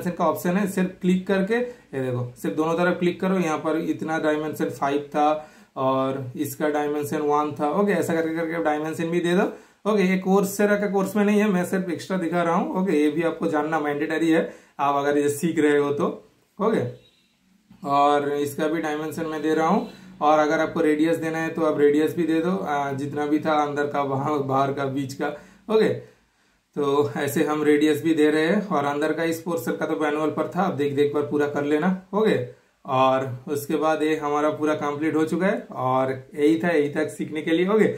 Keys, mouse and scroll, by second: 0.6 super+middle click, 0.6 typing, 1.4 super+click, 3.9 super+click, 3.9 typing, 5.7 super+click, 5.7 typing, 9.1 super+click, 9.1 typing, 11.9 super+click, 11.9 typing, 14.0 super+click, 14.0 typing, 15.7 super+click, 16.5 super+click, 16.5 typing, 19.5 super+click, 20.7 typing, 20.9 super+click, 22.4 super+click, 26.9 super+right click, 27.1 super+click, 27.8 super+click, 32.9 super+click, 34.2 super+click.